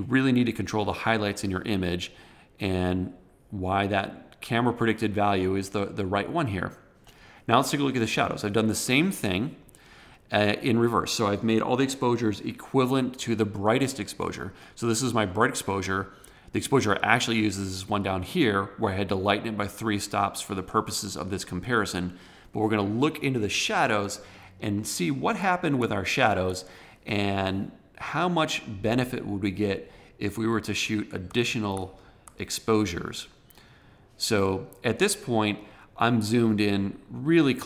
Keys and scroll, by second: 24.7 super+=, 31.1 super+=.